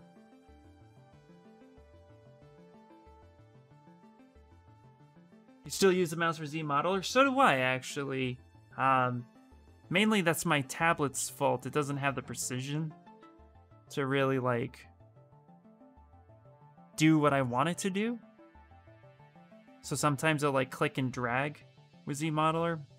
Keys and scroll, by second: 0.2 ctrl+z, 0.7 ctrl+z, 1.3 s, 13.3 b, 13.7 s.